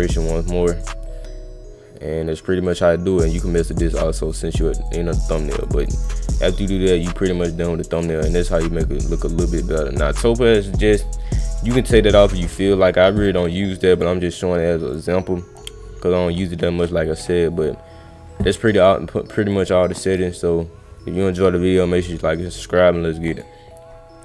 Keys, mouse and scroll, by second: 2.7 click, 3.3 click, 3.6 click, 3.9 click, 4.2 click, 4.5 click, 4.8 click, 5.2 click, 5.5 click, 5.7 click, 5.9 click, 6.2 click, 7.0 click, 7.9 click, 8.5 click, 13.1-13.5 scroll up 2, 13.9 click, 14.9 click, 18.7 click, 19.5 click, 20.1 click, 23.3 click.